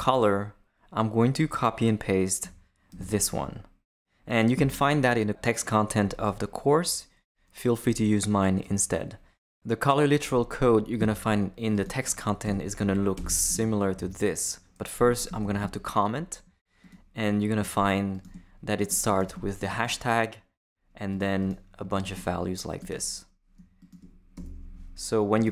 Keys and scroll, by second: 2.9 super+v, 12.4 Return, 13.3 super+Return, 13.5 super+v, 13.9 super+Left, 14.6 Left, 15.4 super+/, 24.3 shift+BackSpace, 25.1 BackSpace.